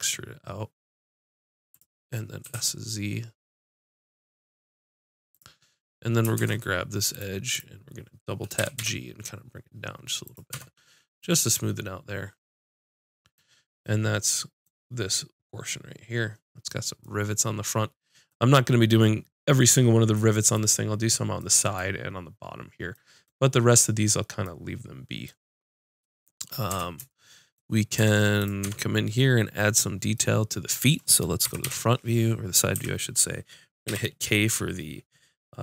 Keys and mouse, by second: 0.4-1.7 drag, 2.4 s, 5.4 click, 6.4 ctrl+Tab, 8.6 g, 10.5-11.8 drag, 10.5 Tab, 26.7 Tab, 28.0 Tab, 28.4 click, 28.6 Tab, 31.4 KP_1, 31.9 KP_5, 32.7 a, 33.9 k.